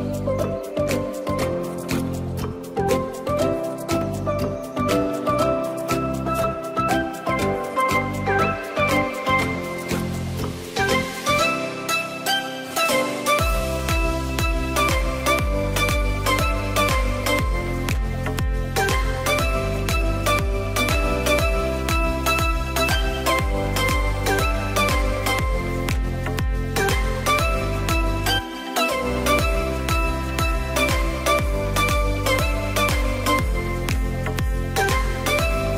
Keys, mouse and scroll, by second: 2.8 click, 3.2 click, 5.0 click, 5.4 click, 6.0-7.0 middle drag, 7.0 shift+click, 7.6-10.2 middle drag, 10.8 s, 13.1 click, 15.1 ctrl+r, 19.2 click, 20.2 KP_3, 21.8 click, 23.8 click, 25.8 b, 27.7 s, 31.0 click, 31.3 scroll down 1, 31.4-32.7 middle drag, 32.7 Tab, 33.0-34.6 scroll down 1, 34.6 click, 35.1-35.5 scroll down 2, 35.5-35.7 scroll up 2.